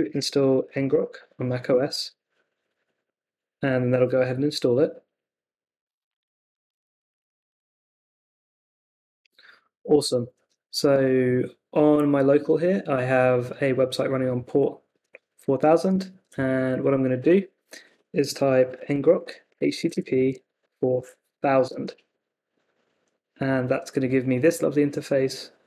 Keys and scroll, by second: 0.0-1.5 typing, 1.7 Return, 15.6 super+Tab, 18.4-21.1 typing, 21.6 Return.